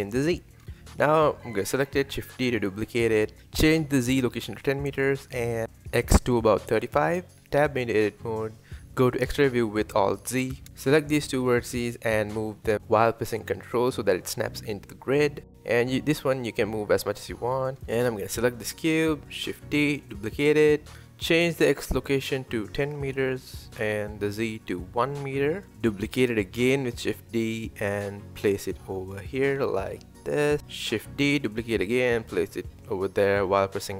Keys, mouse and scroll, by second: 0.0-0.3 shift+middle drag, 0.3 click, 1.1 shift+d, 2.4-3.9 drag, 4.5-4.9 scroll up 3, 4.9-5.4 scroll down 3, 5.4-6.9 drag, 7.2 Tab, 7.5 click, 8.0 alt+z, 8.2 click, 9.0 g, 9.9 click, 10.3-11.1 scroll down 1, 11.1 g, 11.9 g, 14.9 click, 15.6 g, 17.5 middle click, 18.5 click, 19.4 shift+d, 21.2-25.0 drag, 27.1-27.5 scroll up 1, 27.5-27.8 shift+middle drag, 27.8-28.7 scroll up 2, 28.9 shift+d, 30.7 shift+d.